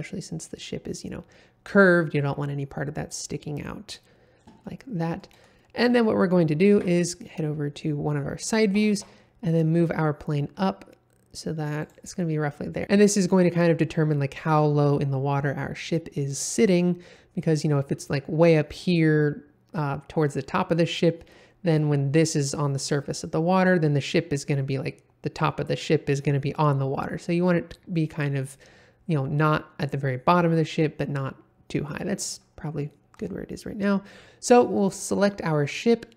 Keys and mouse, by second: 4.6-5.2 middle drag, 5.5 shift+middle drag, 6.0 middle click, 6.7 KP_1, 8.7 g, 8.9 z, 11.8 click, 32.8-33.2 middle drag.